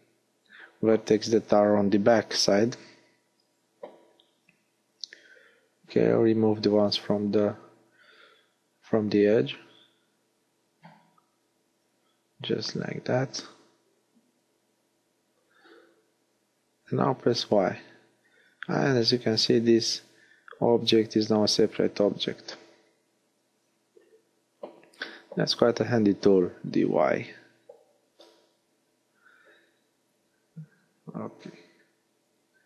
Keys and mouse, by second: 2.7-3.9 middle drag, 9.5 middle click, 16.4 y, 18.5 g, 20.9 g, 22.2 click, 24.7 g, 25.3-27.1 drag, 28.7-30.9 drag.